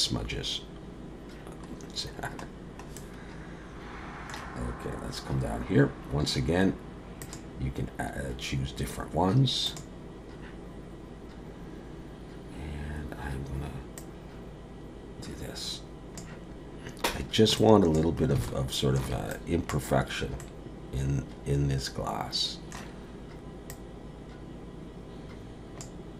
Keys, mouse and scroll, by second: 1.9-2.6 scroll down 1, 3.0 middle click, 4.8-5.9 scroll down 10, 7.2 click, 14.0 click, 17.6 click, 18.4 alt+middle click, 19.3 click, 20.4 middle click, 23.7 click.